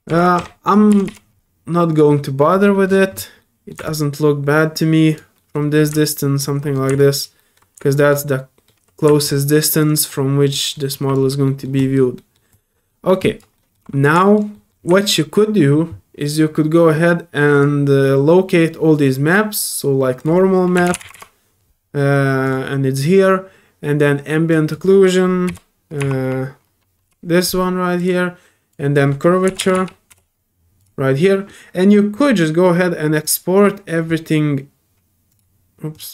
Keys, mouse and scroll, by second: 0.6 click, 1.9 click, 2.6 middle click, 2.6-3.2 scroll down 3, 2.8 middle click, 3.1 middle click, 3.4 middle click, 3.8-5.1 alt+drag, 5.3 alt+middle click, 6.2 alt+middle click, 6.7 alt+middle click, 7.0 alt+click, 7.4 alt+middle click, 7.9 alt+click, 8.2 alt+middle click, 9.2 alt+click, 10.1 alt+click, 10.7 alt+middle click, 11.1 alt+click, 11.4 alt+middle click, 11.8 alt+click, 12.2 alt+middle click, 12.5 alt+click, 12.9 alt+middle click, 13.2 alt+click, 13.5 alt+middle click, 14.2 alt+click, 14.5 alt+middle click, 15.0 alt+middle click, 17.5 alt+click, 20.2 click, 22.4 click, 24.5 click, 28.0 click, 28.7 click, 30.8 click, 32.1 click, 33.2 click, 35.3 click, 35.9 click.